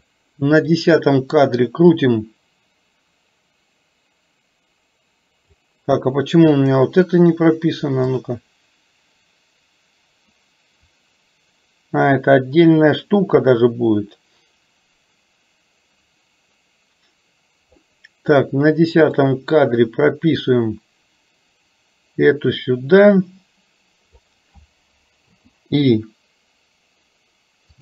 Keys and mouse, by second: 0.7 click, 2.2-5.7 drag, 6.6 click, 8.2-17.8 drag, 20.6-24.3 drag, 25.3 i.